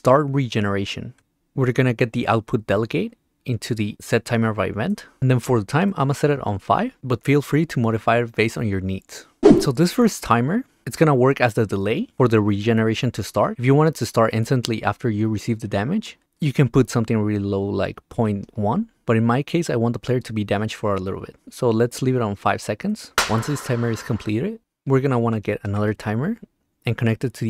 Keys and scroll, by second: 1.2 Return, 2.6 Return, 6.8 5, 18.4 1, 22.8 5, 25.8 ctrl+c, 26.1 v.